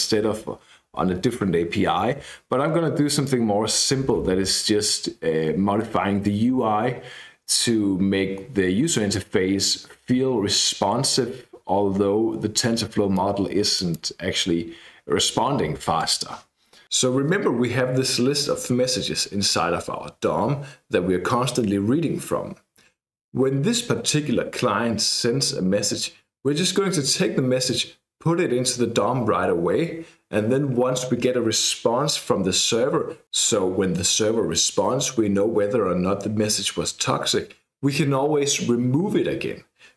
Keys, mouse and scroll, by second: 3.2-14.2 drag, 13.5 right click, 16.0 click.